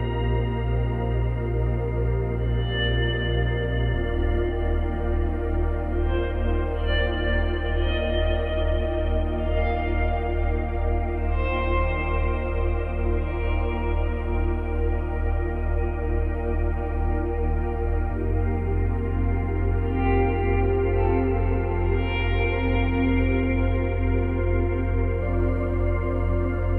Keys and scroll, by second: 6.2 space, 7.7 space, 13.5 space, 16.1 space.